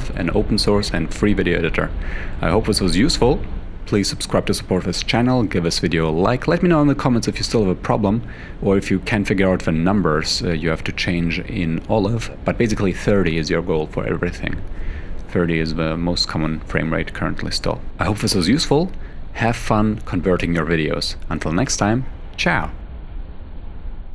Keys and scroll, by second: 2.0 f.